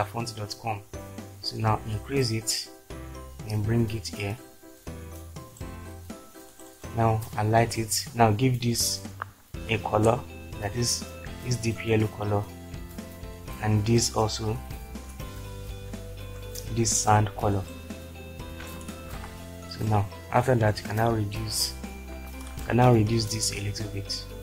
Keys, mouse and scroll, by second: 9.2 shift+Left, 15.5 shift+Left, 19.2 ctrl+space, 22.6 ctrl+space.